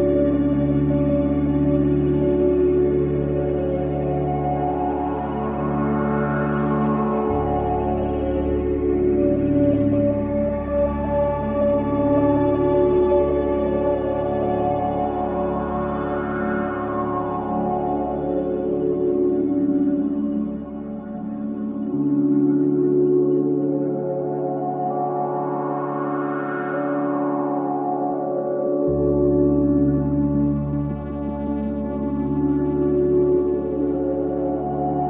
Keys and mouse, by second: 5.9 click, 6.5 click, 7.5 shift+d, 11.8 click, 14.5 2, 16.5-17.8 drag, 20.1 g, 24.8 Tab, 28.9-29.8 drag.